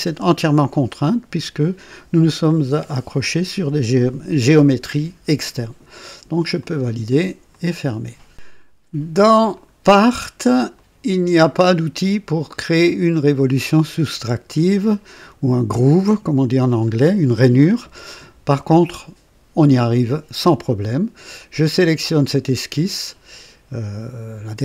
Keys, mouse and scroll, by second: 6.5 click, 7.5 click, 9.5 click, 10.7 click, 17.1 scroll up 1, 17.7 scroll down 1, 21.7 click.